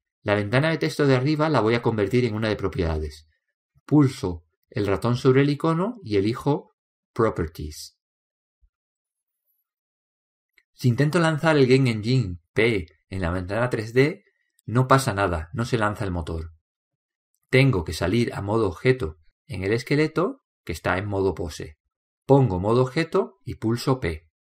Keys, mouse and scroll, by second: 12.7 click, 13.7 p, 20.1-21.9 drag.